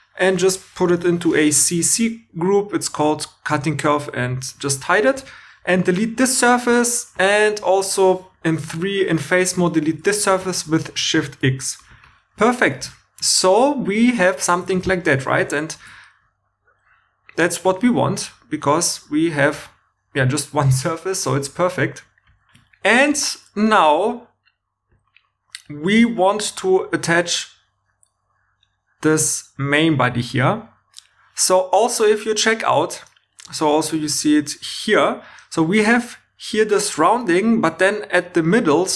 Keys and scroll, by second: 0.8 shift+c, 1.0 shift+c, 1.4 Return, 5.1 Tab, 6.0 x, 8.4 3, 10.4 shift+c, 11.4 shift+x, 12.7 shift+e, 14.7 shift+e, 15.7 shift+e, 22.7 shift+e.